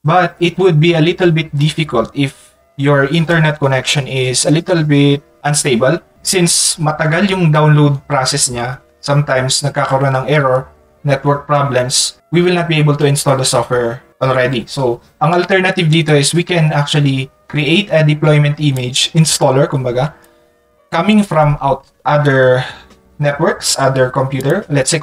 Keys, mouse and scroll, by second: 18.8 click, 24.4 click.